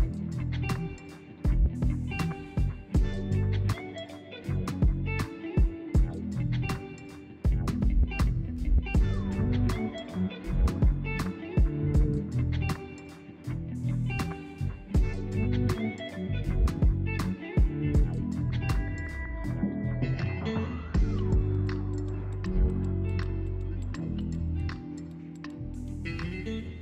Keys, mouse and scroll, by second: 10.5 click, 10.8 ctrl+a, 13.0-13.4 scroll up 1, 13.4 Tab, 14.0-16.5 middle drag, 16.5 KP_1, 17.5-19.1 scroll up 1.